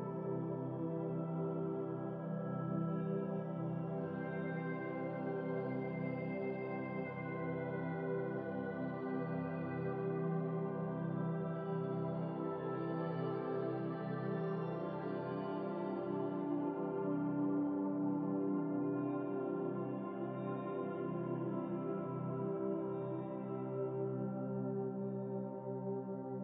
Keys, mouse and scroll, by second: 3.1-6.0 drag, 6.1 KP_Decimal, 7.2-7.9 scroll up 6, 10.3 click, 10.6-12.1 scroll down 19, 12.1-14.0 drag, 15.6-17.3 middle drag, 17.7-18.2 scroll down 8, 19.2-21.1 middle drag, 22.6 KP_0, 24.7-25.5 shift+middle drag, 25.5 click.